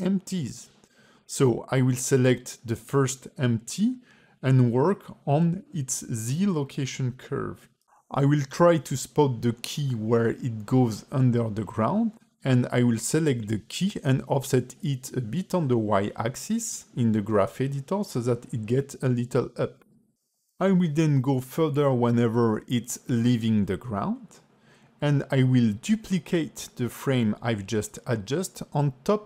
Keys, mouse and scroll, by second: 3.5 space, 4.5 click, 7.7 click, 9.4 click, 10.2-10.6 scroll up 8, 10.8 shift+middle click, 11.6 Right, 12.5 shift+middle click, 12.9 a, 13.0 a, 13.4 click, 14.1 g, 23.2 scroll down 1, 23.4 shift+middle click, 25.3 click.